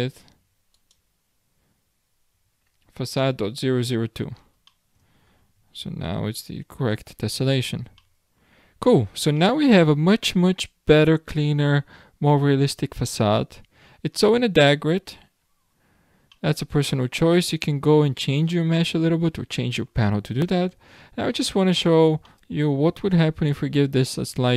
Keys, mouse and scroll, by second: 0.7 click, 4.3-4.7 scroll down 3, 4.7-5.4 middle drag, 5.4-6.0 scroll down 1, 6.0 alt+a, 6.4-7.0 scroll up 7, 7.4-8.0 scroll down 3, 8.0-8.8 shift+middle drag, 8.8-9.4 scroll up 4, 9.4-11.8 middle drag, 11.8 scroll down 1, 12.2-12.7 scroll up 10, 13.1-14.3 scroll down 14, 14.3-15.4 middle drag, 15.4-15.8 scroll up 8, 16.3 scroll down 1, 16.4-18.0 middle drag, 18.0-18.6 scroll down 3, 18.6-20.4 middle drag, 20.4-20.8 scroll up 6, 21.1-22.3 scroll down 13, 22.3-23.9 shift+middle drag, 23.9-24.3 scroll up 10.